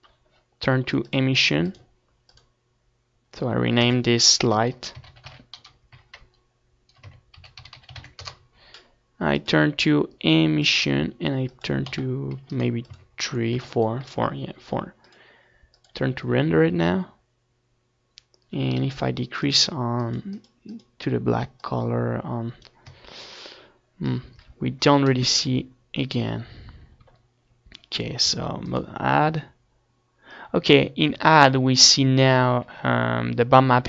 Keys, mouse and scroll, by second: 0.0 KP_1, 1.3 g, 2.0-11.0 drag, 2.3 KP_0, 13.6-17.4 drag, 17.8-19.7 drag, 20.8-22.3 middle drag, 22.3-25.3 drag, 28.6 right click, 29.6-32.9 middle drag, 31.5-32.9 drag.